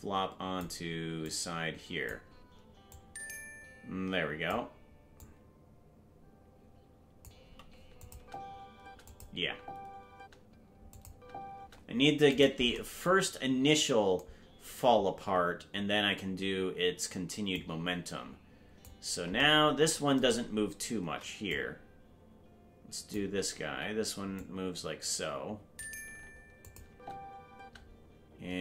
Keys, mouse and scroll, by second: 1.2 click, 2.9-4.5 drag, 5.1-7.2 drag, 8.0 click, 8.1 space, 9.0 click, 9.0 space, 9.4 space, 10.9 click, 11.1 space, 12.3 right click, 17.5-18.8 drag, 21.4-23.1 drag, 24.3-25.8 drag, 26.6 click, 26.8 space.